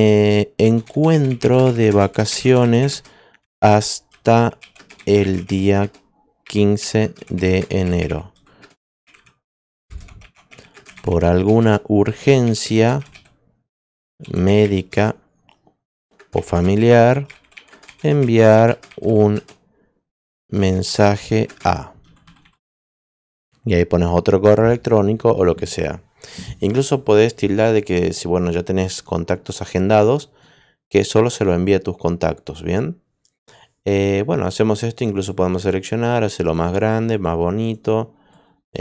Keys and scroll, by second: 0.0-23.0 typing.